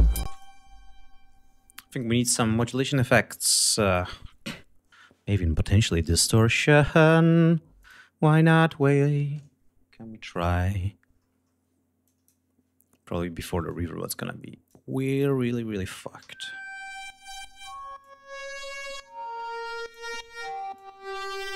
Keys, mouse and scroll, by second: 0.2 space, 0.3 click, 2.4 right click, 5.7-6.3 scroll down 2, 7.7 click, 12.0 click, 13.6-14.8 drag, 16.1 l, 17.2 right click, 17.9-20.1 drag, 20.7 click.